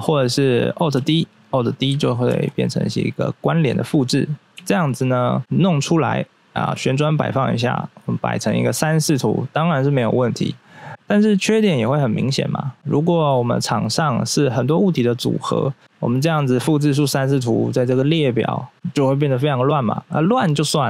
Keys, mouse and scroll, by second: 0.0 right click, 0.9 x, 1.0 click, 1.4 right click, 2.3 alt+d, 3.3 click, 4.5 x, 4.6 click, 11.2 scroll down 1, 17.9 scroll down 1, 19.9 scroll up 1.